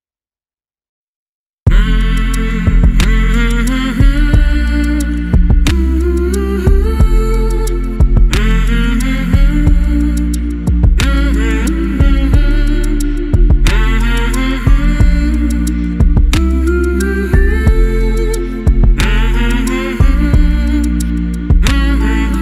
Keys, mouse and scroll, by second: 0.8 click, 2.0 alt+click, 3.1 click, 4.6 click, 6.0 alt+click, 7.2 click, 8.4 click, 9.6 alt+click, 12.3 click, 14.1 shift+click, 16.6 click, 20.4 right click.